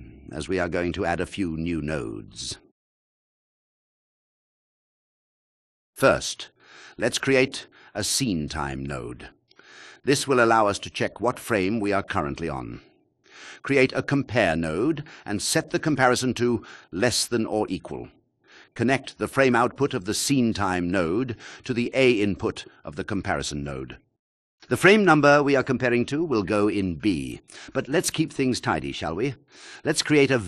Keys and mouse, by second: 0.1 click, 3.6 click, 5.1-5.5 drag, 5.8 shift+a, 8.5 click, 13.2 shift+a, 15.8-17.6 drag, 18.0 click, 21.6-23.5 drag, 23.8 shift+click, 27.6 shift+v, 27.6 a, 28.3 click, 28.8 shift+a.